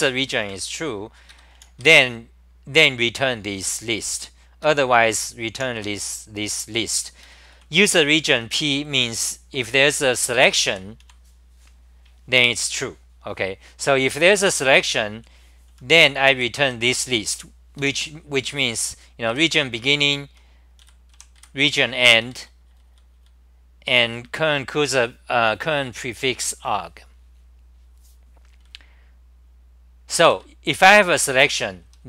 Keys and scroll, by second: 0.5 super+=, 1.3 ctrl+g, 1.6-2.3 typing, 4.6 ctrl+g, 4.9-6.2 typing, 7.2 ctrl+g, 7.5-8.8 typing, 10.3 ctrl+g, 10.7 w, 11.0 2, 14.8 ctrl+g, 15.1-17.1 typing, 17.8 ctrl+g, 18.4-22.9 typing, 19.9 ctrl+g, 22.2 ctrl+g, 24.3 1, 30.3 ctrl+g, 31.6-32.0 typing.